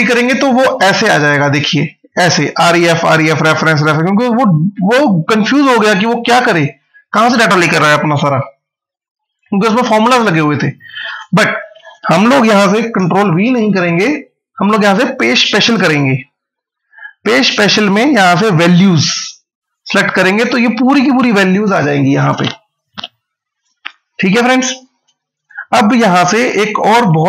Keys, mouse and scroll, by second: 1.4 ctrl+v, 4.5 ctrl+z, 6.2 click, 10.9 right click, 19.5 click.